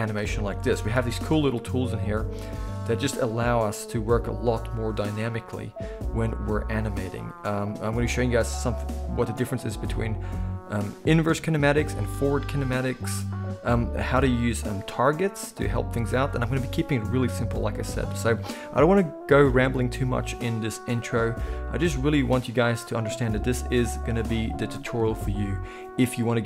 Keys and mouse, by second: 0.3 a, 0.7 alt+g, 0.9 alt+r, 1.1 alt+s, 2.1-5.9 middle drag, 3.3 g, 6.0 g, 6.5-14.1 middle drag, 7.6 g, 9.1 r, 14.1 click, 14.2-22.7 middle drag, 14.6 g, 22.7-23.4 drag, 23.4-26.4 middle drag, 23.4 g.